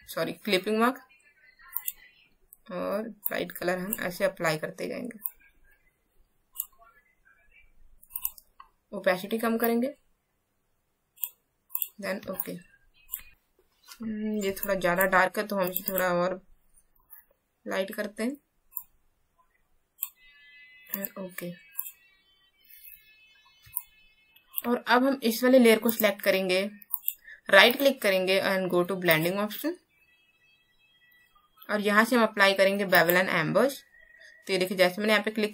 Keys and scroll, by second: 12.2 space, 14.5 space, 23.6 space.